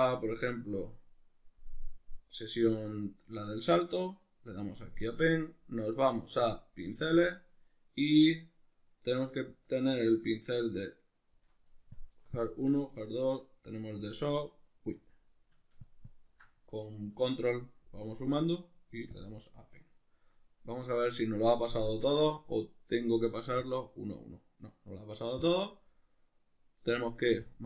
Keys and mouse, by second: 20.6 right click, 21.8 Tab, 23.6-27.6 drag.